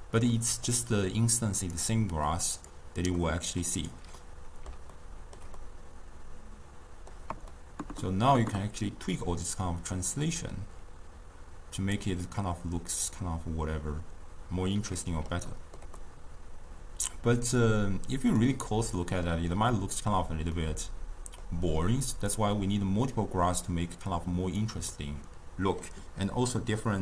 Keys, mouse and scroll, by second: 1.8 click, 2.5 click, 3.2-3.8 middle drag, 3.8 click, 4.2-9.4 middle drag, 9.4-12.4 drag, 12.4-15.5 middle drag, 15.6-22.4 ctrl+middle drag, 22.4-26.5 drag, 26.5-27.0 middle drag.